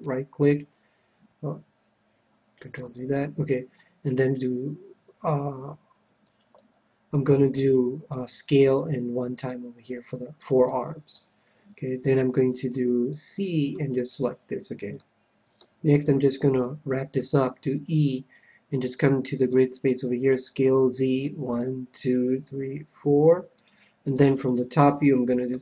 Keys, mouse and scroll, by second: 2.7 ctrl+z, 8.2 s, 9.4-11.1 drag, 10.7 a, 11.1 KP_1, 12.8 c, 14.2-15.8 right drag, 14.9-16.6 middle drag, 17.7 e, 19.5-21.3 drag, 20.3 s, 23.6-25.3 drag, 24.1 KP_7, 25.4 s.